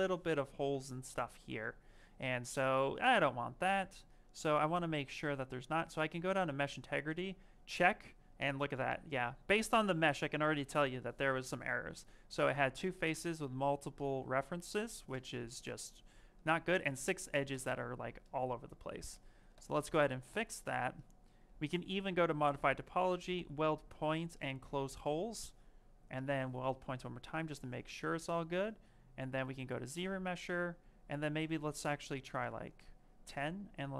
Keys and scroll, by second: 15.0 Return, 17.4 Return, 19.4 Return.